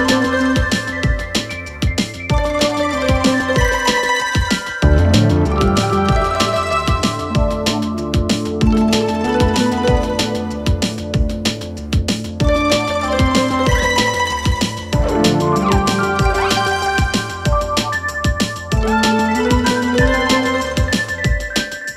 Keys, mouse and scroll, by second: 0.0-2.7 drag, 6.5-9.3 drag, 12.1-14.7 drag, 15.6-18.4 drag.